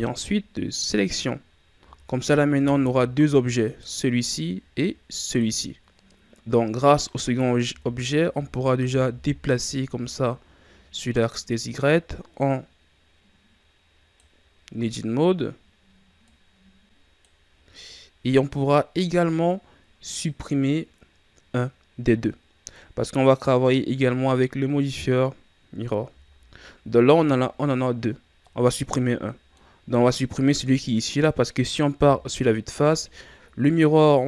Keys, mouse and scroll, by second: 1.8 z, 2.5 Tab, 3.6 right click, 5.2 right drag, 7.6 Tab, 8.3 a, 8.7 a, 10.2-13.1 drag, 16.2-17.7 drag, 17.7-18.9 middle drag, 18.9-19.8 scroll up 3, 21.4-24.3 scroll down 1, 24.3-26.0 middle drag, 26.0 KP_1, 28.2 scroll down 2, 28.3-30.7 middle drag, 30.7 right click, 31.9 KP_1, 33.4-34.2 scroll down 1.